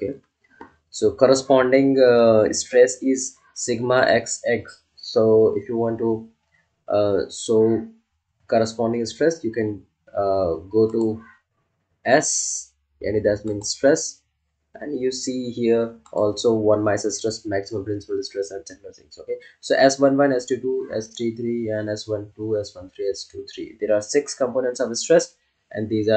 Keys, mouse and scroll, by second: 10.9 click, 13.4 click, 16.0 click.